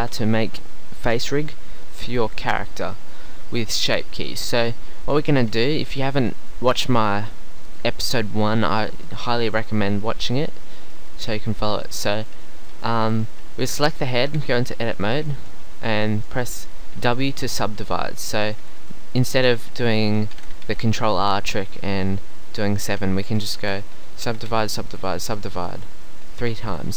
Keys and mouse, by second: 1.9-5.1 middle drag, 14.4 Tab, 17.0 w, 20.4 ctrl+z, 20.7 ctrl+r, 23.6 a, 23.8 w, 24.3 w, 24.5 w.